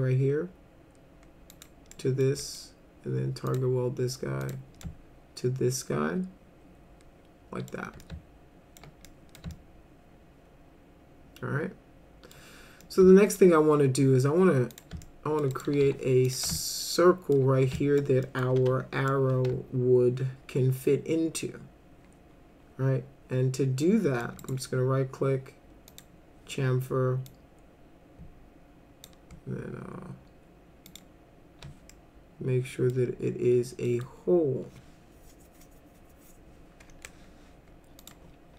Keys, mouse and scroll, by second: 1.5 click, 1.9 middle click, 2.4 middle click, 3.5 click, 4.4 click, 4.8-7.7 alt+middle drag, 8.0-8.8 alt+middle drag, 9.1 middle drag, 9.5-12.3 alt+middle drag, 12.8-13.4 alt+middle drag, 14.7 click, 15.0 alt+middle click, 15.5 right click, 15.8 w, 16.3 click, 16.6 alt+middle click, 17.8 alt+middle click, 18.3 middle drag, 18.6 F3, 19.1-24.2 middle drag, 24.4 right click, 25.9 click, 27.2-29.0 drag, 30.9 click, 31.9-32.9 alt+middle drag, 33.9 middle click, 38.0 click.